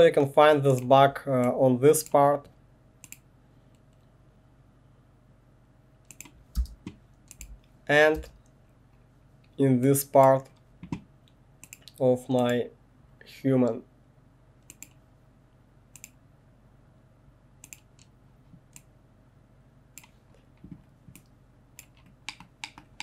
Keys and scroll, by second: 6.5 space, 7.4 1, 8.2 space.